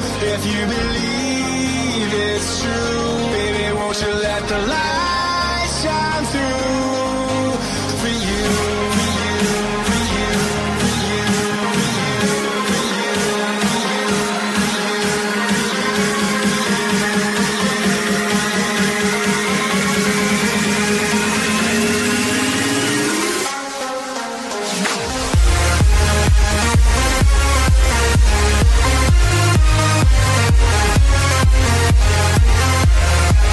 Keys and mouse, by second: 4.3 click, 7.6 i, 11.9 click, 11.9 i, 14.4 click, 15.5 click, 18.0 ctrl+z, 18.9 click, 20.8 ctrl+z, 20.8 click, 22.5 ctrl+z, 22.5 click, 23.9 click, 25.1 m, 27.9 click, 27.9 m, 30.1 m, 30.9 click, 31.0 click, 31.8 click.